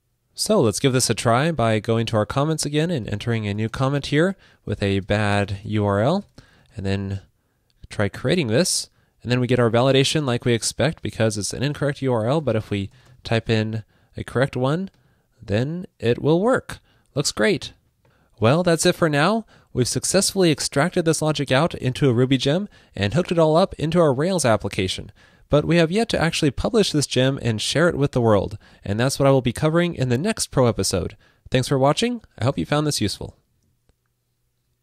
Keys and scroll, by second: 6.8 super+v.